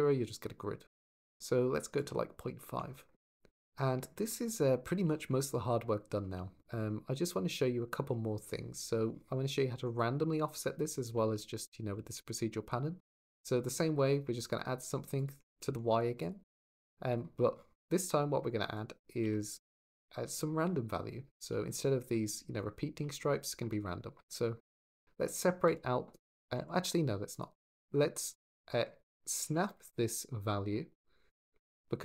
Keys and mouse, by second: 3.4 g, 4.2 shift+middle drag, 4.3 middle drag, 7.0 click, 10.7 click, 10.9 shift+d, 11.8 shift+d, 12.9 click, 15.0 click, 15.6 shift+d, 16.3 click, 17.8 click, 19.0 g, 19.5 click, 19.7 click, 28.1-31.9 drag.